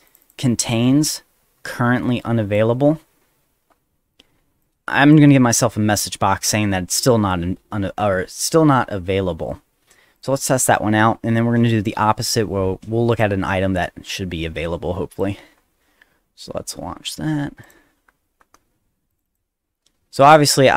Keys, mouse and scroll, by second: 0.1 click, 0.2 click, 1.7 click, 4.6 click, 10.2 click, 13.1 click, 15.1 click, 15.6 middle click, 17.6 click, 19.1 click, 20.5 click.